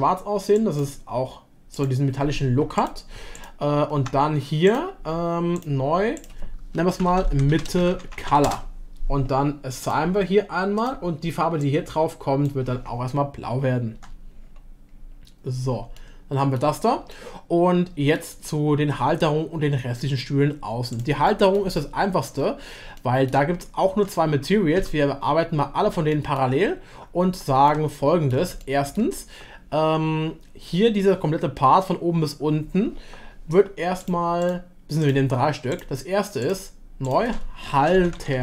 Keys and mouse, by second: 1.8-2.9 drag, 4.7-5.4 drag, 5.7 click, 6.2-9.1 drag, 7.7 shift+t, 9.8-10.3 drag, 13.9 Tab, 16.0-16.6 shift+middle drag, 17.1-18.2 shift+middle drag, 21.3 middle drag, 21.8-22.2 shift+middle drag, 23.0-23.3 shift+middle drag, 23.9 Tab, 24.7 Tab, 25.0 a, 26.1 shift+click, 27.6 shift+middle click, 28.6 shift+middle click, 34.0-38.4 drag.